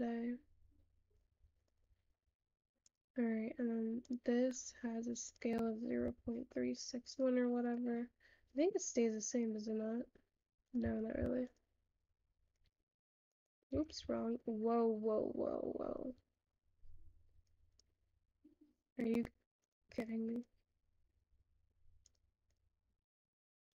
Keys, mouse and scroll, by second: 17.7 click, 21.9-23.7 ctrl+drag.